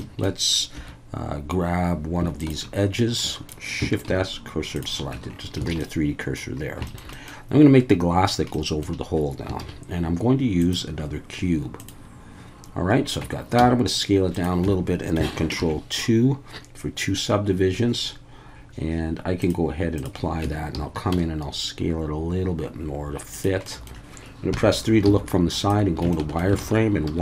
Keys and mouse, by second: 0.0 shift+middle click, 0.7 2, 2.4 alt+shift+click, 3.2 middle click, 4.1 shift+s, 5.1 Tab, 5.7 alt+a, 5.8-6.4 middle drag, 6.9 shift+middle drag, 7.1 middle click, 8.5-8.8 middle drag, 9.6 shift+a, 13.2 Tab, 13.6 s, 14.3 click, 14.6 Tab, 15.6 ctrl+2, 19.4-20.0 drag, 20.4 Tab, 20.7 a, 21.1 s, 23.3 click, 23.7 middle click, 24.5 KP_3, 25.1 z, 26.1 shift+middle click, 26.6 alt+a, 27.1 1.